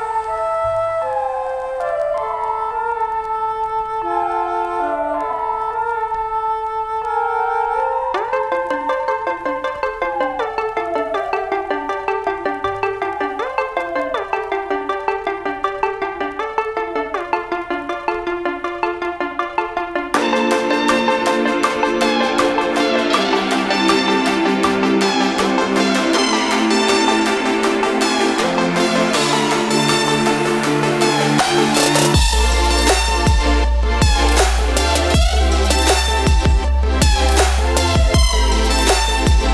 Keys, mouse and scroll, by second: 1.1-2.9 alt+drag, 2.9-5.4 alt+drag, 5.4-10.6 drag, 10.6 ctrl+z, 12.8-14.6 alt+drag, 15.9 ctrl+z, 16.6 shift+click, 17.6 ctrl+z, 18.1-19.9 drag, 19.9 ctrl+z, 20.9-23.7 drag, 24.9 ctrl+z, 25.7 ctrl+shift+z, 28.6 v, 29.1 click, 30.5 ctrl+z, 33.8 p, 37.4 click, 38.0 ctrl+z.